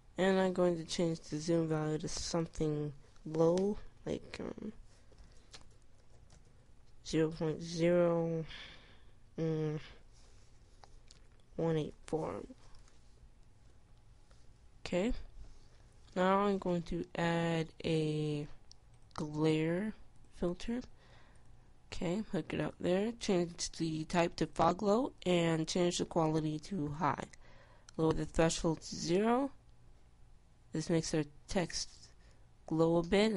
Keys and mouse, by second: 25.2-30.0 drag.